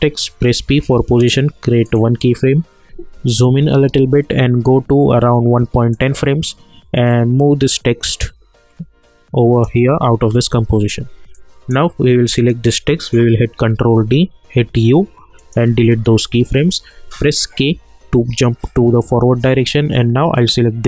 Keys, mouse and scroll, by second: 0.6 p, 1.8 click, 3.1 =, 3.6 =, 5.9-12.4 drag, 13.5 ctrl+d, 14.6 u, 15.4 click, 17.5 k, 20.3-20.8 drag.